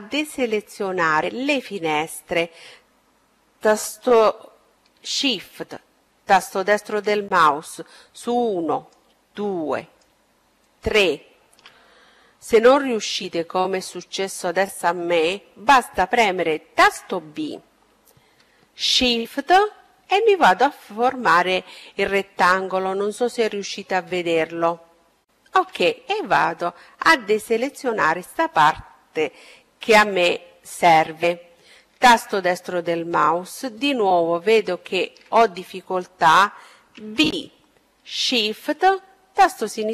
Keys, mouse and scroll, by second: 4.8-10.3 right drag, 14.6 b, 24.6-26.7 middle drag, 27.9 KP_7, 30.1-33.2 right drag, 34.9 b.